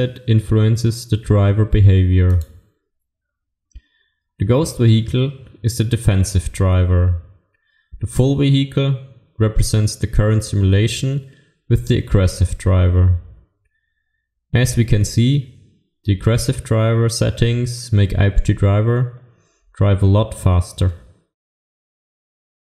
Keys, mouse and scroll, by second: 12.1-14.5 scroll down 1.